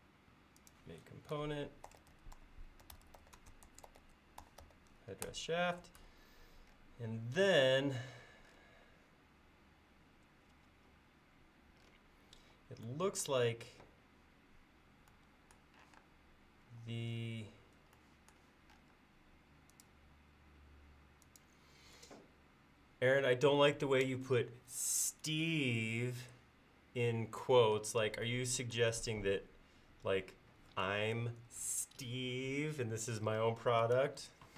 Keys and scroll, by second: 1.7-5.6 typing, 5.3 Return, 12.4 l, 15.9 r.